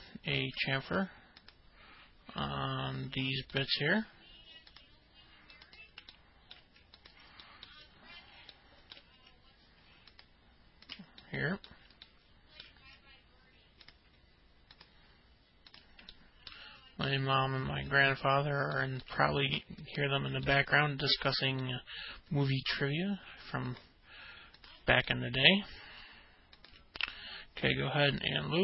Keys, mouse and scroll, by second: 0.0 ctrl+click, 1.5 ctrl+click, 2.4 ctrl+click, 4.1 ctrl+click, 4.6 middle click, 6.6 ctrl+click, 7.2 alt+middle click, 8.5 middle click, 9.6 alt+middle click, 11.2 ctrl+click, 11.9 ctrl+click, 12.3 middle click, 14.9 ctrl+click, 15.8 ctrl+click, 16.7 ctrl+click, 17.2 alt+middle click, 18.9 ctrl+click, 19.8 alt+middle click, 20.4 middle click, 21.0 alt+middle click, 23.9 ctrl+click, 24.7 ctrl+click, 25.6 ctrl+click, 26.1 alt+middle click, 27.6 ctrl+click.